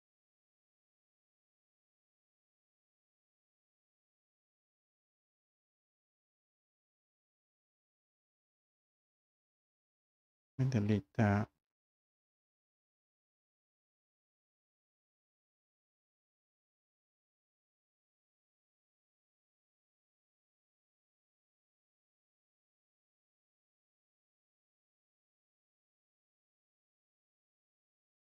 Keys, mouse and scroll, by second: 1.3 click, 2.4 scroll, 2.4 scroll up 3, 3.1-3.4 scroll, 3.4 scroll down 3, 4.0 scroll up 2, 5.1 scroll, 5.2 Escape, 7.2 Escape, 8.6 click, 8.9 scroll, 10.0 Delete, 10.9 scroll down 3, 11.4 scroll, 13.4 click, 15.2-15.6 scroll down 3, 19.8 Escape, 20.4 Escape, 21.4 Escape.